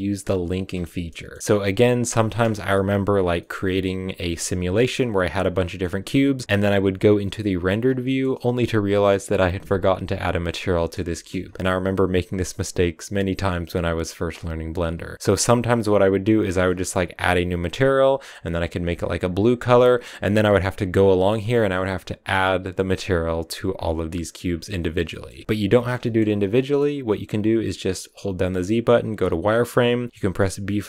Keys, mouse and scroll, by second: 1.9 a, 2.0 middle click, 2.2 scroll up 1, 2.3 shift+middle click, 2.9 scroll down 1, 3.2-4.7 middle drag, 4.7-5.4 scroll up 1, 5.4-6.4 middle drag, 6.4 z, 7.5 z, 7.8 shift+middle click, 8.2-10.2 middle drag, 10.8-18.9 shift+middle drag, 18.9 click, 21.7 click, 22.8 click, 24.6 middle click, 25.1 shift+middle click, 25.1 scroll down 1, 25.3 middle click, 25.4 click, 25.5 shift+middle click, 25.7 scroll up 1, 25.8 middle click, 26.2 scroll down 1, 26.4-30.0 middle drag, 30.0 z, 30.1-30.8 middle drag.